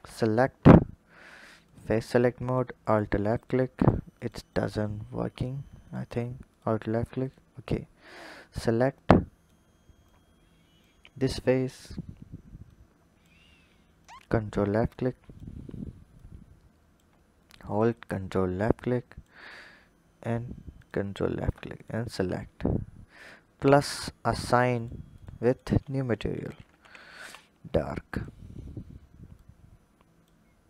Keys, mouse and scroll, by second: 1.4 click, 2.3 alt+click, 3.1 alt+click, 3.6 alt+click, 4.0 alt+click, 4.3 alt+click, 5.6 click, 6.3 alt+click, 7.0 alt+click, 7.9 click, 8.8 click, 9.9-11.1 drag, 12.5-13.9 drag, 14.7 click, 16.0-17.6 drag, 18.4 click, 20.5 ctrl+click, 21.6 shift+click, 22.9-28.0 drag, 29.2 click.